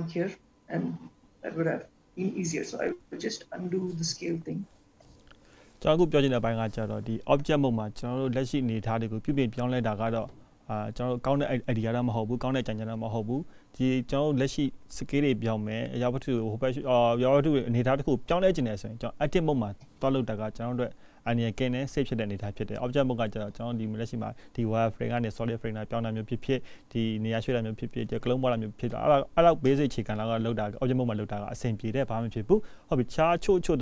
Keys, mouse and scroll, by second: 3.4 ctrl+z, 3.8 ctrl+z, 4.3 ctrl+z, 4.6 ctrl+z, 4.9 ctrl+z, 5.1 ctrl+z, 5.3 ctrl+z, 5.7 ctrl+z, 6.0 ctrl+z, 6.2 ctrl+z, 6.5 ctrl+z, 6.8 ctrl+z, 7.1 ctrl+z, 7.9 ctrl+z, 8.0-8.7 ctrl+z, 9.0 ctrl+z, 10.7 click, 12.9 click, 14.5-15.7 scroll down 3, 15.7 click, 17.6 click, 17.7 click, 24.7 click, 26.5 click, 26.6 click, 31.0 click, 33.3 click, 33.5 click.